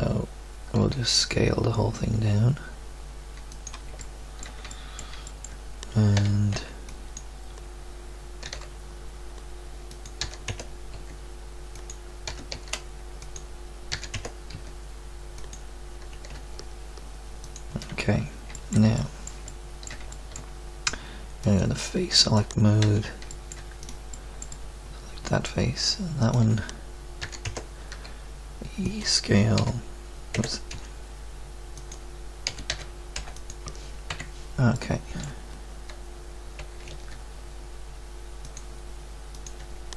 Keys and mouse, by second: 0.7 s, 4.2 click, 6.2 a, 6.5 b, 8.4 g, 10.2 e, 10.9 s, 12.3 e, 13.9 e, 14.5 s, 16.1 e, 21.4-23.2 drag, 22.8 z, 24.1 middle click, 24.9 middle click, 27.2 e, 27.9 s, 29.5 s, 30.7 e, 32.5 s, 34.1 KP_3, 36.6 g, 39.3 click.